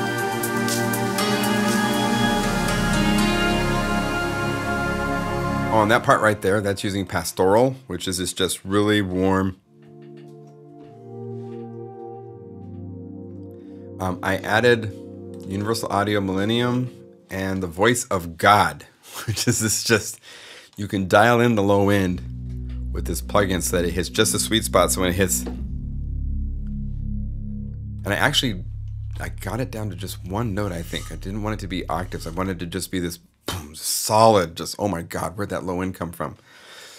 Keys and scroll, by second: 5.3 space.